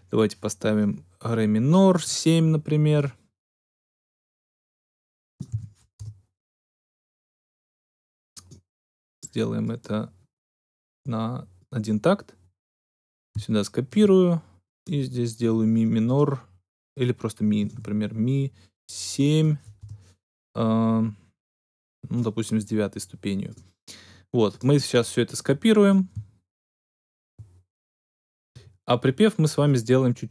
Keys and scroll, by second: 0.0-0.5 typing, 5.5 shift+d, 5.9 shift+Return, 17.6 shift+e, 19.7 Return.